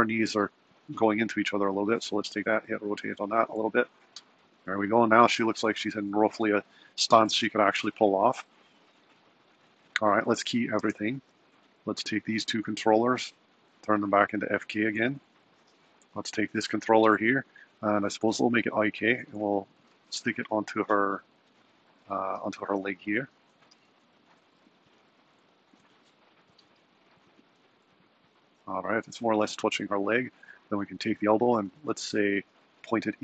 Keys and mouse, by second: 0.3 typing, 2.4 r, 5.8 r, 10.3-11.5 typing, 12.3 click, 12.6-13.7 shift+drag, 15.2-16.3 drag, 18.7-19.8 drag, 20.3 g, 22.5 g, 23.8 r, 25.6 g, 28.7 r, 31.0 click, 32.0 r.